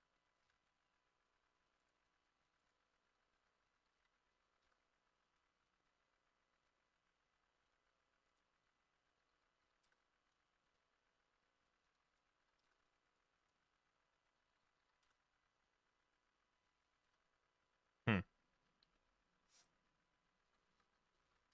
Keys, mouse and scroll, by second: 0.5 Return, 3.1 click, 3.1-4.4 typing, 4.7 Return, 9.1 2, 9.4 4, 9.7 0, 9.9 Return, 12.5 0, 12.7 Return, 14.4 1, 14.5 2, 14.9 0, 15.1 Return, 16.1-17.3 ctrl+middle drag, 17.1 ctrl+z, 20.8 1, 21.2 8.